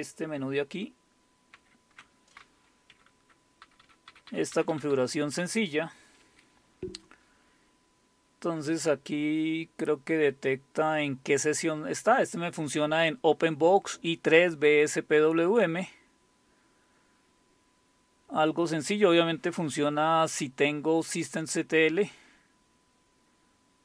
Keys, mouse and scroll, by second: 1.5 super+x, 2.9 Down, 3.1 Down, 3.2 Down, 3.6 Up, 3.8 Up, 4.1 Up, 4.3 Up, 4.5 Down, 4.7 Down, 4.9 Up, 6.2 Escape, 7.8-9.0 scroll down 1, 14.6-15.8 scroll down 1, 15.9-17.8 scroll down 2, 18.3-19.2 scroll up 2, 19.2-19.9 scroll up 1, 19.9-20.8 scroll up 1, 23.7-23.8 scroll up 2.